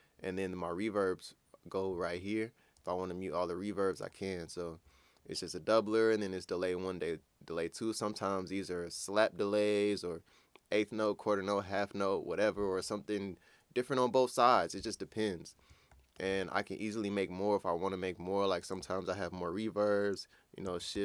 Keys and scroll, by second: 20.9 alt+shift+d.